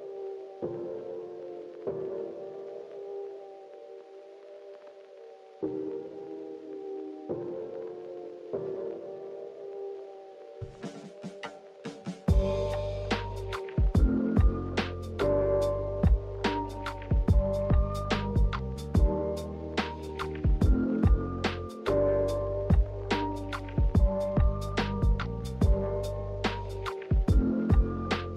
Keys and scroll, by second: 5.9-7.3 typing, 13.5 x, 18.7 v, 19.7 Delete, 22.6 d, 23.8 z, 25.1 v, 27.3 Delete.